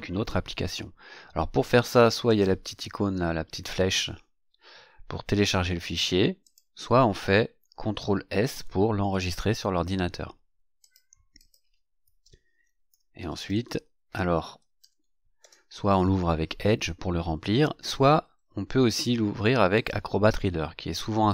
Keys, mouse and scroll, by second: 2.2 click, 6.4 click, 8.5 ctrl+s, 10.8 click, 11.4 click, 12.6-15.5 typing, 19.7 click.